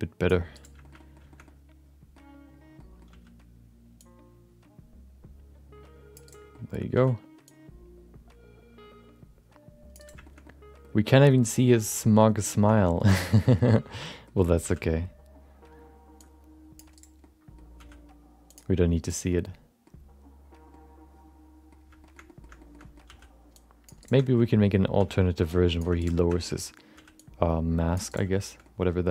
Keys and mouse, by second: 0.8 shift+middle click, 0.9 middle click, 1.3 shift+middle click, 1.4 middle click, 2.7 middle click, 3.1 c, 6.5 middle click, 6.9 c, 10.2 shift+middle click, 10.4 middle click, 11.4 middle click, 12.1 shift+middle click, 12.2 middle click, 12.8 middle click, 12.9 middle click, 13.3 shift+middle click, 13.5 middle click, 13.9 shift+middle click, 14.0 middle click, 14.6 c, 17.2 middle click, 17.7 c, 19.3 middle click, 20.7-21.7 middle drag, 22.0 shift+middle click, 22.2 middle click, 22.6 middle click, 22.7 middle click, 23.0 c, 24.2 middle click, 24.4 middle click, 24.9 c, 26.3 shift+middle click, 26.5 middle click, 26.9 c, 28.3 shift+middle click, 28.8 middle click.